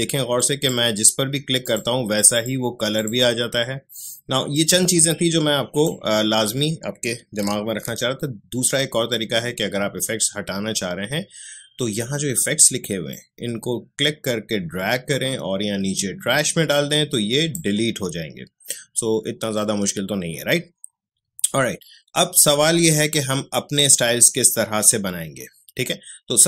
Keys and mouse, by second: 0.3-7.7 drag, 7.7 ctrl+z, 13.1-26.4 drag.